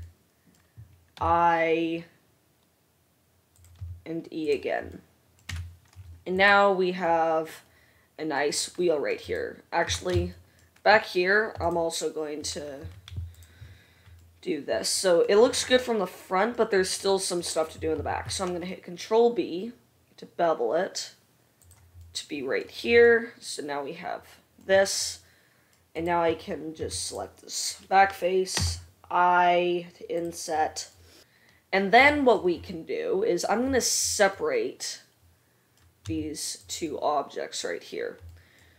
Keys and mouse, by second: 1.4 i, 4.0 e, 5.7 Tab, 6.6-14.2 drag, 6.6 middle click, 6.6 right click, 9.5 middle click, 9.5 right click, 10.0 Tab, 11.8 alt+middle click, 11.8 alt+right click, 13.0 2, 13.4 alt+middle click, 13.4 alt+right click, 14.2-15.9 right drag, 18.3 ctrl+b, 24.4-25.9 right drag, 26.4 click, 26.4 right click, 27.0 middle click, 27.0 3, 28.8 i, 30.1-31.7 right drag, 36.3 s, 36.9 right click, 37.7-38.7 drag.